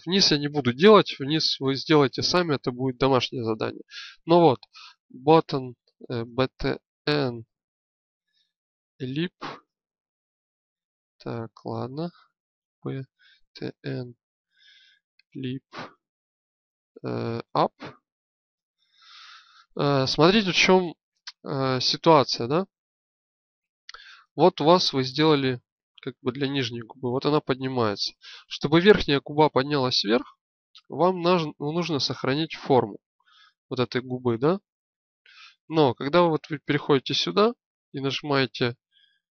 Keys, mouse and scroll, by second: 24.5-27.8 drag, 28.0-30.0 drag, 35.8-38.9 drag.